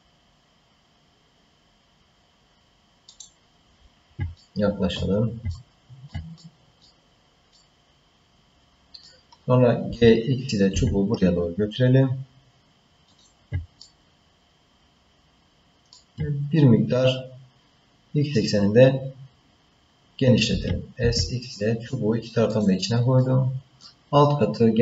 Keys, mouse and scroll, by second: 4.4 ctrl+middle click, 5.5 shift+middle click, 6.1 scroll up 1, 6.3 middle click, 7.1-7.5 scroll down 2, 7.5-9.0 middle drag, 9.8 g, 13.8-16.0 ctrl+middle drag, 20.5 s, 23.2-24.8 middle drag.